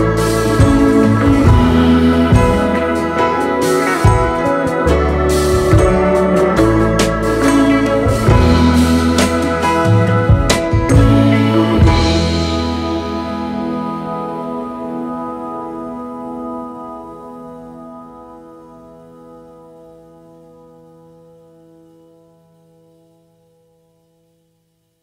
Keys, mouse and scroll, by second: 0.6-1.6 space, 4.4 alt+scroll up 1, 5.4 alt+scroll up 1, 5.7 space, 7.0 double click, 8.6 ctrl+z, 8.9 double click, 9.9 right click, 12.6 space, 12.8 double click, 14.8 double click, 19.0-19.5 alt+scroll up 2, 19.3 space, 20.3 Down, 20.6 Down, 20.8 Down, 21.4 Up, 22.3 space, 22.4 double click, 24.7 space, 24.8 double click.